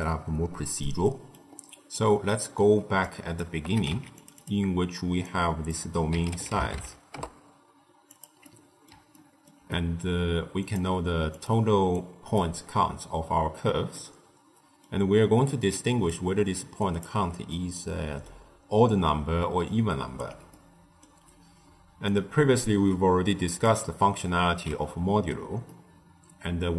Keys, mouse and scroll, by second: 0.7 middle click, 1.5-1.8 scroll down 1, 1.8 middle click, 2.4-2.9 scroll down 1, 2.9 click, 3.6 g, 4.3 drag, 5.1 drag, 8.3-10.5 middle drag, 10.5-11.9 drag, 13.8-15.6 middle drag, 15.6 click, 16.3 d, 16.4 click, 16.9 d, 17.4-18.4 middle drag, 18.4-19.1 scroll down 3, 19.3 d, 19.6 right click, 20.1 d, 20.4-21.2 middle drag, 21.2-22.0 scroll down 1, 22.0 click, 23.6 click, 24.4 x, 25.6-26.7 middle drag.